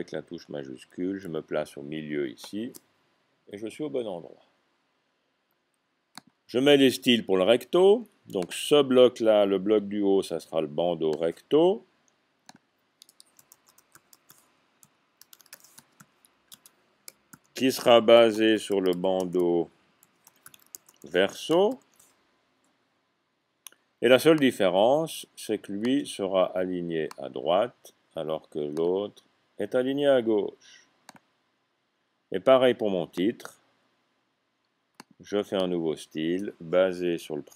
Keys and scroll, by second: 13.3-16.0 typing, 17.3 typing, 18.3-21.6 typing.